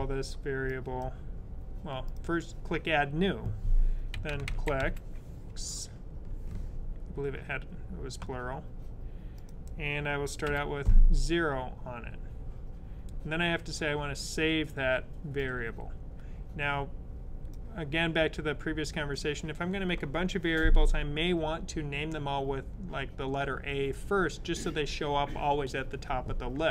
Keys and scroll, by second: 2.0 typing, 3.7-5.3 typing, 10.3 0.